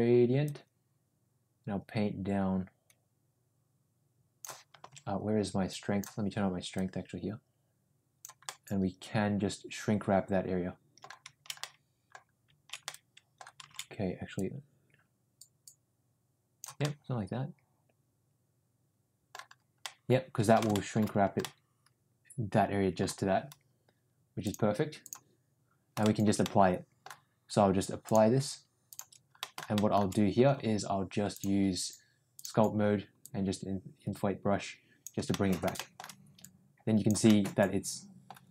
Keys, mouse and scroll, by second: 0.4-4.4 drag, 5.1 ctrl+z, 5.6 click, 6.7-8.2 drag, 8.4-10.9 middle drag, 11.5 middle click, 12.8-13.3 middle drag, 13.9 ctrl+z, 14.3-16.6 drag, 16.7-19.2 middle drag, 19.8-20.5 middle drag, 20.7 shift+middle drag, 21.4-23.0 middle drag, 24.3-25.1 drag, 26.0 shift+middle drag, 26.4-27.0 middle drag, 28.0-29.1 drag, 29.4 shift+middle click, 29.7 shift+middle click, 31.2-32.4 drag, 33.1-35.0 drag, 35.3 middle click, 35.7 shift+middle click, 36.3 click, 37.2-38.3 middle drag.